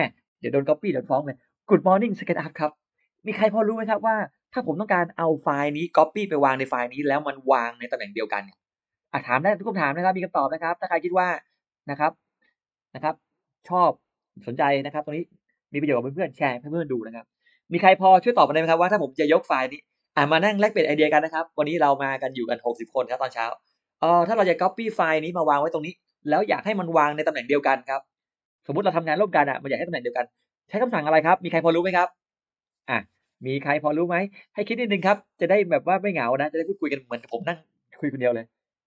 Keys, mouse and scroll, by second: 4.3 scroll up 2, 4.5-5.4 scroll down 6, 7.5-7.8 scroll up 2, 8.6 scroll up 2, 9.3-9.6 scroll down 2, 10.6 click.